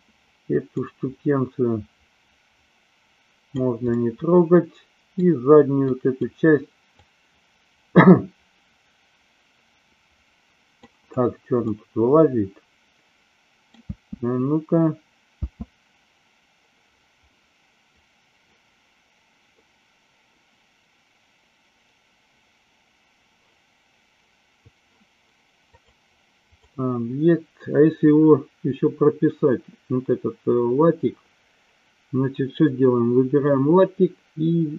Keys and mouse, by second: 0.8-3.5 drag, 3.9-5.3 middle drag, 5.8 click, 6.9-10.8 drag, 11.5-13.8 middle drag, 13.8 space, 17.3 middle click, 25.8 click.